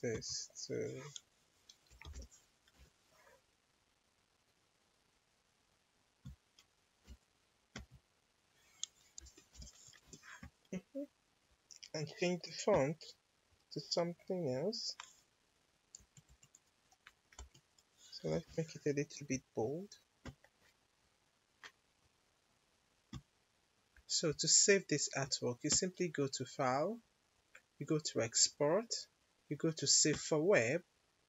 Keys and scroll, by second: 1.6-2.5 typing, 2.6 Return, 9.1 5, 9.4 0, 9.9 Return, 15.9 Down, 17.3 Up, 18.4 Return.